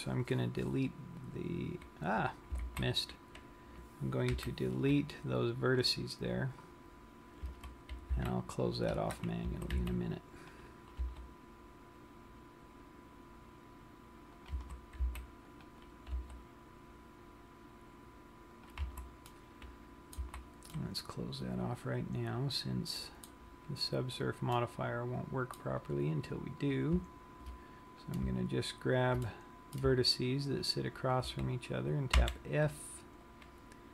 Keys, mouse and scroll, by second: 3.3 super+z, 4.9 Delete, 8.1 a, 8.6 c, 10.1 a, 10.3 c, 11.5 right click, 11.6 g, 15.1 click, 15.1 a, 15.3 c, 16.5 right click, 16.7 g, 19.2 click, 19.4 a, 19.8 middle click, 20.7 z, 21.1 middle click, 24.8 middle click, 26.8 click, 28.1 click, 29.4 middle click, 30.9 shift+click, 32.5 f.